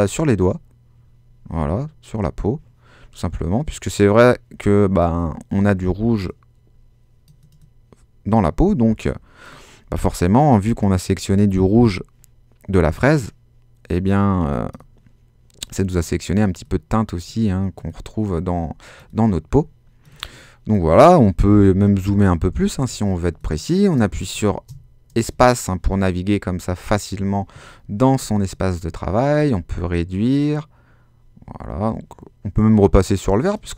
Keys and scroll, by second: 23.1 super+space, 23.6 space, 24.4 space.